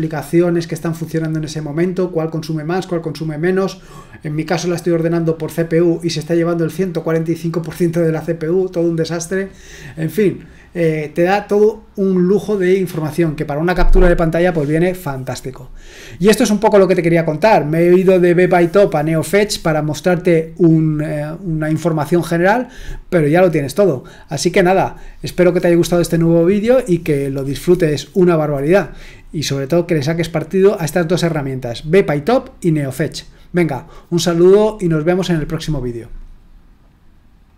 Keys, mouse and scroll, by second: 37.4 click.